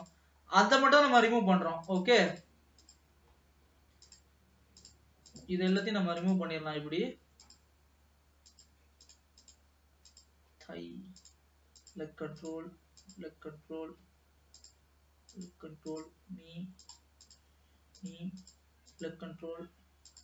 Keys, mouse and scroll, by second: 0.1 click, 0.6-1.4 scroll down 2, 1.9 click, 2.5 click, 3.4-4.1 scroll down 2, 4.1-5.1 drag, 5.5 click, 6.3 click, 6.8 scroll down 2, 7.6 click, 8.6 click, 10.1 click, 10.6-11.5 scroll down 1, 12.0 click, 13.1 click, 13.7-14.8 scroll down 4, 14.8 click, 15.4 click, 17.1 click, 18.1 click, 19.1 click, 19.5-20.2 scroll down 2.